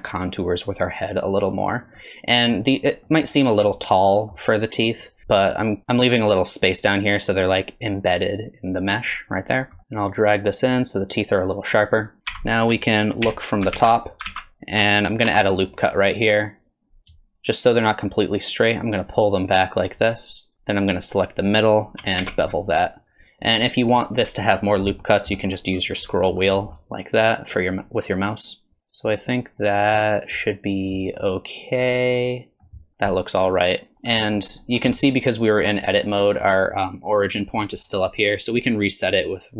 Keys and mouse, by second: 2.0 middle click, 3.1 middle click, 3.8 middle click, 5.2 KP_3, 9.8 alt+z, 9.8 1, 9.8 KP_3, 9.9-11.1 drag, 12.1 click, 13.3 KP_7, 13.8 alt+z, 14.3 alt+z, 15.3 ctrl+r, 16.7 click, 17.4 shift+click, 18.5-20.5 drag, 20.7 click, 22.2 ctrl+b, 31.2-32.7 middle drag, 32.9 Tab, 32.9 alt+z, 33.1-33.9 middle drag, 33.9 alt+z, 34.2 middle drag, 35.0-36.0 middle drag, 38.5-39.5 drag.